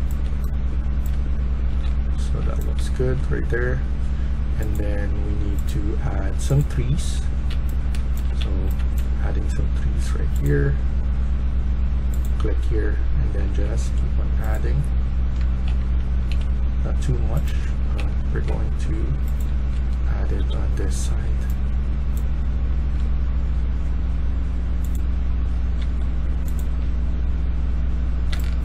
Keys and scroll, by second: 1.0-2.7 typing, 7.5-8.7 typing, 13.3 a, 15.0-16.0 typing, 17.2-18.0 typing, 19.2-20.5 typing, 22.6-23.4 typing, 25.4-26.5 typing, 28.2-28.6 typing.